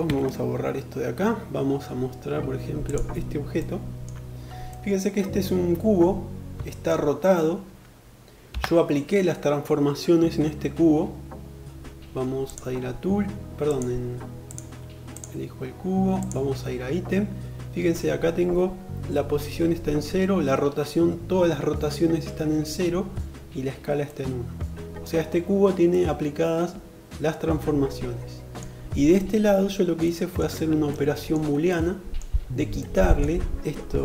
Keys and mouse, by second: 2.3 click, 2.4 middle click, 8.0 n, 11.8 click, 13.8 click, 15.5 click, 23.4-34.0 middle drag.